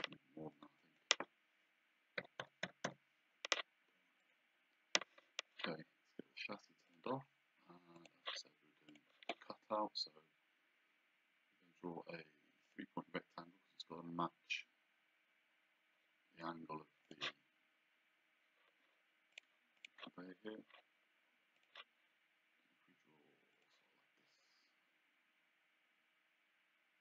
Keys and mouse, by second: 0.5 click, 2.2 KP_1, 2.7 KP_8, 2.9 KP_Enter, 4.2 click, 6.9 click, 8.0 click, 12.7 click, 17.1 click, 19.3 click, 21.6 click, 23.6 click.